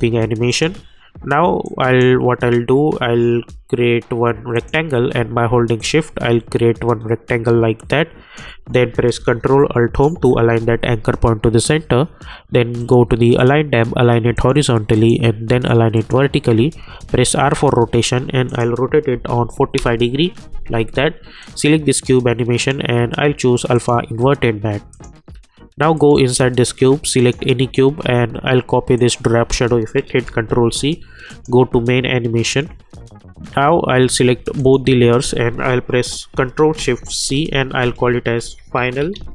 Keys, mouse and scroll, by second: 0.5-3.0 drag, 3.0 -, 4.5-9.9 drag, 9.9 ctrl+alt+Home, 14.0 click, 17.1 r, 18.5 click, 19.7 Return, 21.4 click, 30.2 ctrl+c, 31.3 click, 34.6 shift+click, 37.5 ctrl+shift+c, 38.1-39.3 typing.